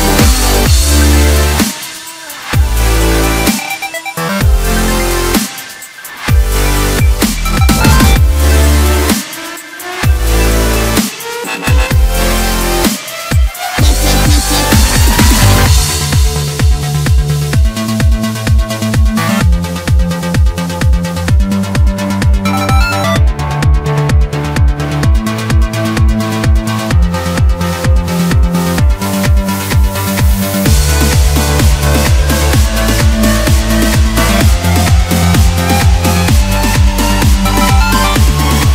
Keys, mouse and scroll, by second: 0.3 click, 0.8 scroll down 2, 1.1-3.0 middle drag, 3.0 KP_7, 3.9 scroll up 1, 5.6 ctrl+r, 13.0 ctrl+r, 17.8 shift+click, 18.0 shift+click, 18.8 s, 23.4 ctrl+r, 27.7 ctrl+r, 31.7 shift+click, 32.8 s, 36.0 scroll down 3, 36.2-38.4 middle drag, 38.4-38.7 scroll up 1.